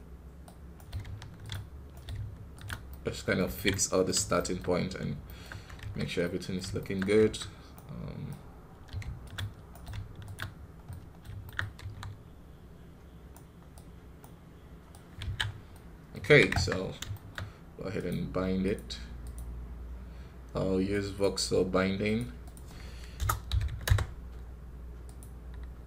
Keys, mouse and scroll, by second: 2.7-4.7 middle drag, 4.7 scroll down 2, 5.1 shift+middle click, 5.4-5.7 scroll up 1, 5.7 KP_1, 6.1-7.1 middle drag, 7.1 KP_1, 10.5 scroll down 1, 10.7 middle click, 11.5 scroll up 2, 12.1-13.2 scroll up 1, 15.2 scroll down 1, 15.6 middle click, 16.7 scroll down 1, 17.0-19.5 shift+middle drag, 19.5-25.5 drag.